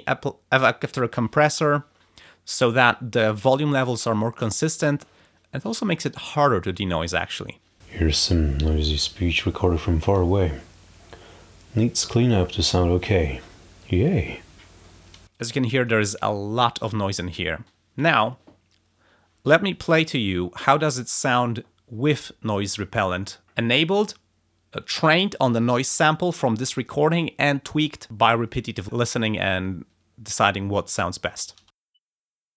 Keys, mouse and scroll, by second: 15.2 space, 16.3 click, 20.6 click, 31.5 space.